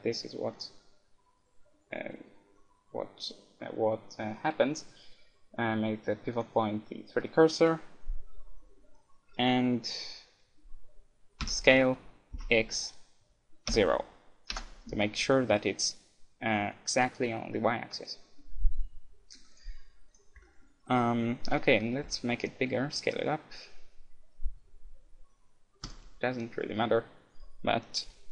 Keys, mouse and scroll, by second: 11.4 s, 18.4-19.5 middle drag, 19.5-21.3 drag, 21.3 middle click, 22.0 s, 22.1-23.5 middle drag, 26.0-27.8 drag, 26.3-27.5 middle drag, 27.8 middle click.